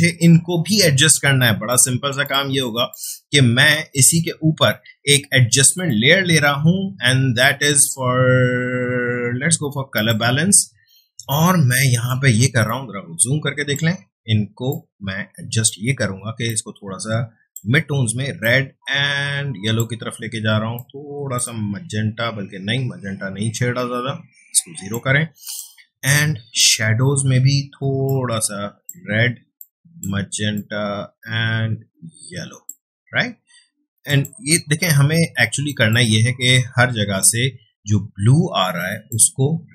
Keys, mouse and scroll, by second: 3.9 space, 4.1-5.7 ctrl+drag, 10.0 click, 12.4 space, 12.6-39.7 ctrl+drag.